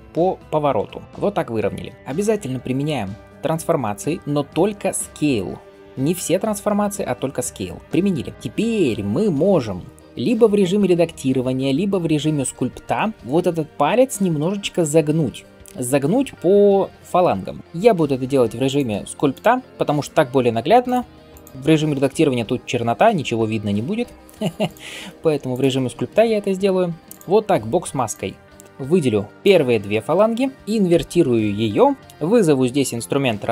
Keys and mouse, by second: 0.3 r, 1.0 g, 3.3 ctrl+a, 8.3-33.5 drag, 17.6 Tab, 30.7 ctrl+i.